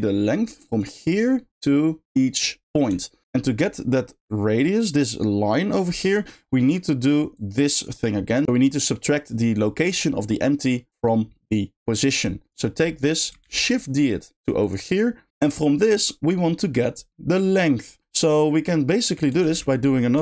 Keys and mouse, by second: 1.1-2.4 drag, 3.0 ctrl+click, 4.2-5.5 drag, 7.3 click, 12.2-12.6 drag, 13.1 middle click, 14.7 shift+drag, 14.9 shift+click, 15.2-16.6 shift+middle drag.